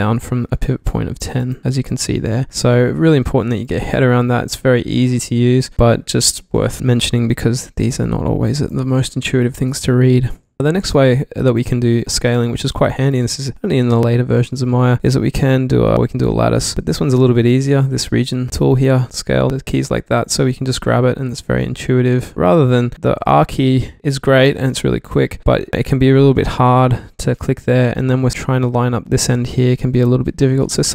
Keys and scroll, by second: 2.5 super+z, 9.0-10.6 typing, 21.5 super+z, 24.0 r, 28.4 super+z.